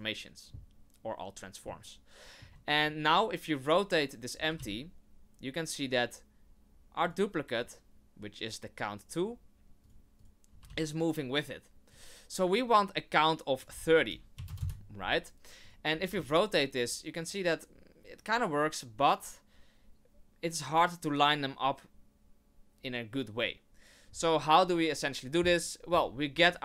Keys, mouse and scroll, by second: 1.7 shift+middle click, 3.1 right click, 4.4 r, 7.5 right click, 9.8 right click, 10.2 right click, 10.5 r, 12.7 right click, 13.6 click, 15.6 right click, 15.9 r.